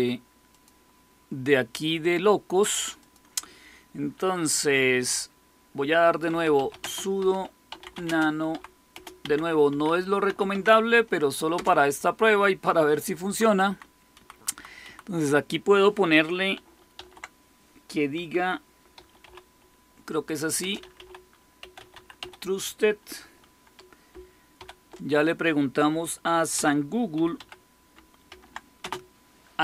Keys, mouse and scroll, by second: 0.5-3.1 drag, 6.0-10.2 typing, 10.4 Tab, 11.5 Return, 13.2 Down, 13.4 Down, 13.6-14.6 typing, 14.8 Right, 16.7-17.4 typing, 18.9-19.2 typing, 20.5-22.6 typing, 24.5 typing, 26.2-28.7 typing.